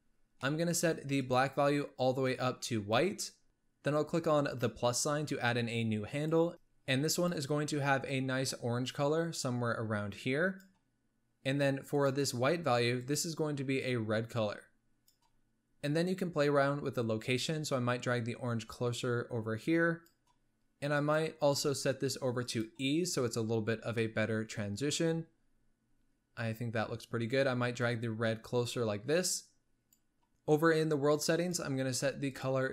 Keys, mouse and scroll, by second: 0.1-0.6 scroll up 4, 0.6 middle click, 1.3 drag, 4.7-6.5 drag, 7.3 drag, 12.2-13.3 drag, 17.8-20.8 drag, 21.1-23.7 drag, 23.7 scroll up 3, 24.1-27.2 middle drag, 28.0-30.3 drag, 31.6 click, 32.4 drag.